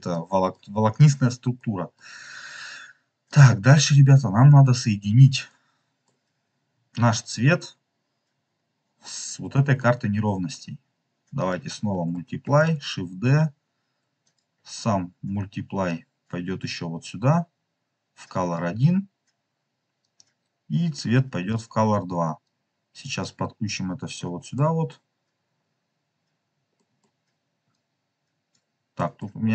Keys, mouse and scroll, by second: 0.1 middle click, 1.1-1.5 scroll down 3, 1.5 middle click, 3.2-4.7 drag, 4.9-5.4 scroll up 2, 5.4 middle click, 6.3 scroll up 2, 8.4 scroll up 2, 9.5 middle click, 11.3 click, 12.4 shift+d, 14.2 click, 15.8-18.5 drag, 19.9-21.5 drag, 22.3-23.2 drag, 24.4 scroll down 1, 24.5 middle click, 25.5 scroll up 2, 25.6-26.6 middle drag, 26.7 scroll down 1, 26.9 middle click, 26.9-27.6 scroll up 1, 27.6 click, 28.9 middle click, 29.3-29.5 scroll down 2.